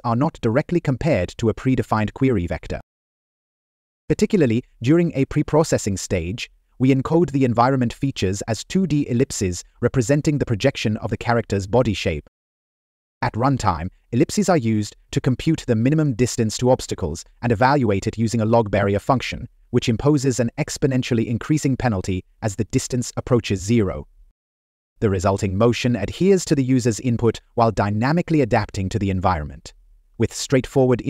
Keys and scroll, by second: 13.9 Left, 15.3 Right, 17.1 Up, 20.0 Up, 20.0 Right, 20.7 Up, 20.8 Left, 25.2 Up, 29.8 Right.